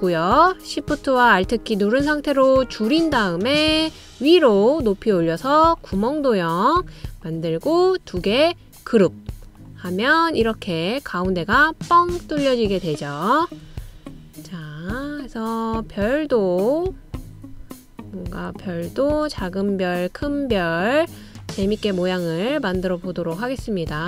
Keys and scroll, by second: 0.1 super+d, 14.6 super+c, 14.9 super+v, 19.8 super+c, 20.1 super+v.